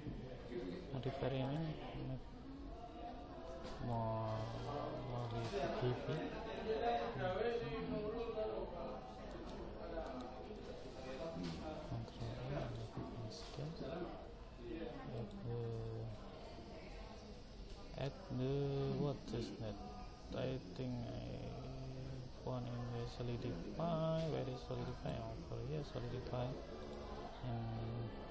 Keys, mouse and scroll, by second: 1.5 click, 3.5-7.4 middle drag, 9.3 right click, 11.9 ctrl+a, 14.5 ctrl+a, 15.3 click, 26.9 click.